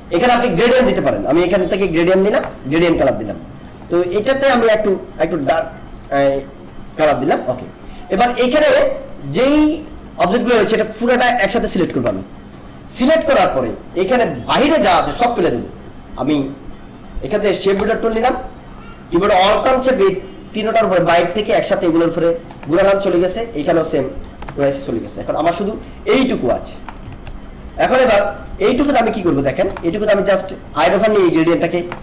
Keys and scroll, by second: 27.6 ctrl+=.